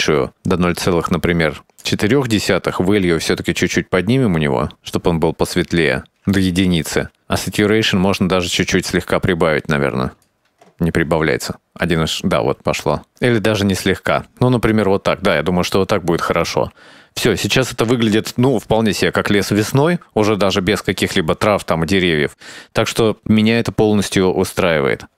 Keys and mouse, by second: 2.8-6.4 shift+drag, 6.5 click, 7.5-10.6 shift+drag, 12.0-14.0 shift+drag, 14.4 click, 16.1 shift+middle click, 23.9 shift+middle drag.